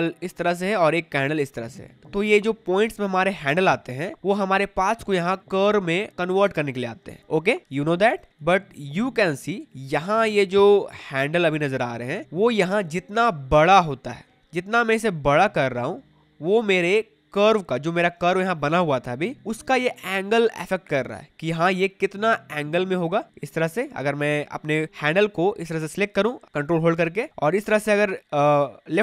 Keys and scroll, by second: 8.3 ctrl+z.